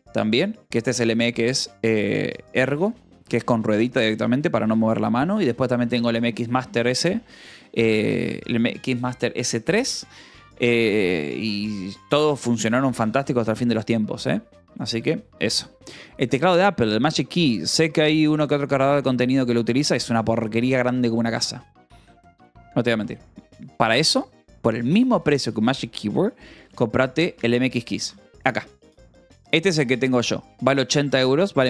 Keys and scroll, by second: 23.9-26.1 typing, 28.1 c.